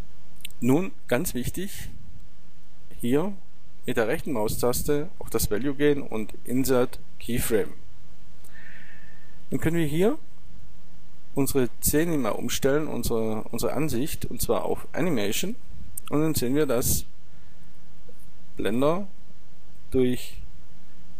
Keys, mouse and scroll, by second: 2.7-8.2 right drag, 10.6-15.1 drag.